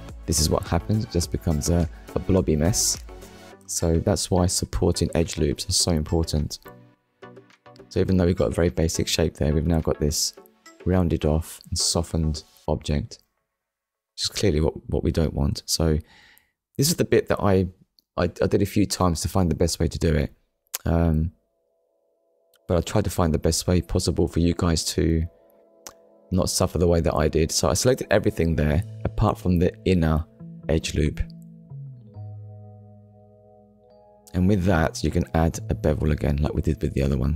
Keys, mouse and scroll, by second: 24.2 click, 25.4 middle click, 34.7 middle click.